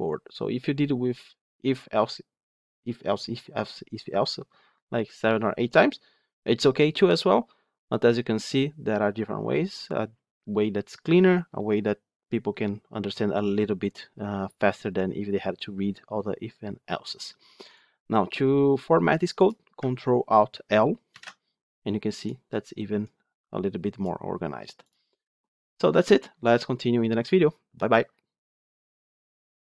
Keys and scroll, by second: 21.1 ctrl+alt+l.